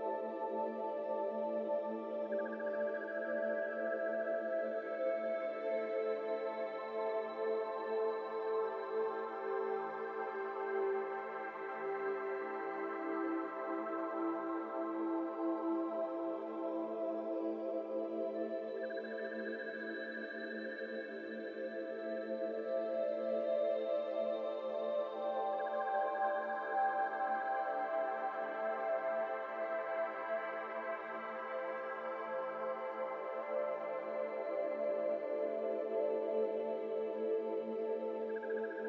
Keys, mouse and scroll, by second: 0.0 alt+z, 0.2-1.6 middle drag, 1.6 ctrl+b, 6.5 Tab, 6.7 scroll down 2, 6.8-8.5 middle drag, 8.5 Tab, 8.7 a, 9.2 shift+n, 9.5 m, 10.6 middle click, 11.5 scroll up 1, 11.6 Tab, 11.7 middle click, 12.1 click, 12.5 click, 12.7 Tab, 13.6 alt+z, 14.1 alt+z, 14.7 2, 15.2 alt+click, 15.9 alt+shift+click, 16.8 alt+shift+click, 17.3 alt+z, 18.3 middle click, 19.1 alt+z, 19.3 middle click, 19.6 Tab, 19.8 middle click, 20.3 Tab, 21.4 3, 21.5 click, 22.2 alt+click, 23.4 ctrl+l, 24.1 alt+z, 25.3 p, 25.9 Tab, 26.3 alt+z, 26.5 click, 26.9 Tab, 27.3 2, 27.6 alt+z, 28.0 alt+click, 28.5 alt+shift+click, 29.2 f, 29.7 alt+z, 30.0 shift+middle click, 30.3-30.6 scroll up 1, 30.6 3, 30.9 click, 32.1 KP_1, 33.6 click, 34.5-35.9 middle drag, 35.9 shift+click, 36.4 shift+middle click, 36.8 2, 37.0 click, 38.2 KP_7, 38.7 alt+z.